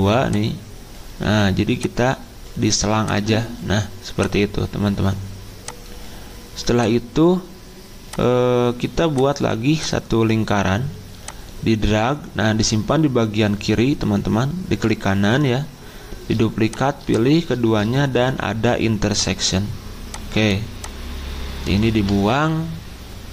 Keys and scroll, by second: 17.7 ctrl+z, 21.9 Delete.